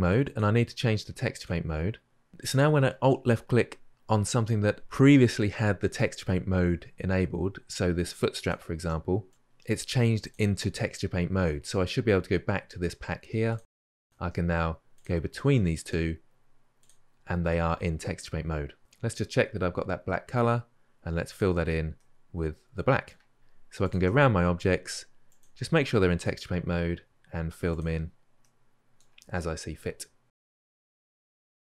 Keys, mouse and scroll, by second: 1.2-9.3 drag, 14.1-14.8 drag, 16.6 alt+click, 21.2-21.8 drag, 21.8-23.7 middle drag, 23.7 alt+click, 26.0-28.2 drag, 28.2-29.8 middle drag, 29.8 alt+click, 30.4-31.2 drag, 31.4-31.7 drag.